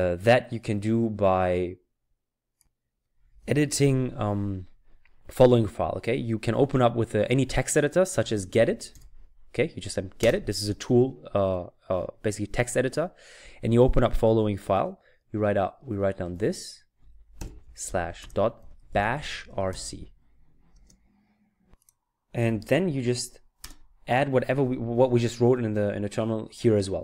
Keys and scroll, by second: 8.0-9.4 typing, 16.3 typing, 18.4-20.7 typing, 23.6 Return.